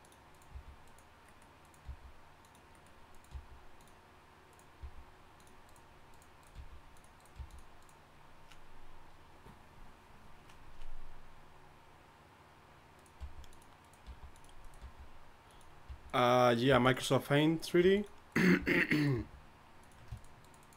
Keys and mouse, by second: 0.5 g, 1.8 g, 3.3 g, 4.8 g, 6.5 g, 7.3 g, 13.2 g, 14.1 g, 14.8 g, 15.8 g, 16.7 g, 17.8 g, 18.6 g, 19.1 g, 20.5 shift+right click.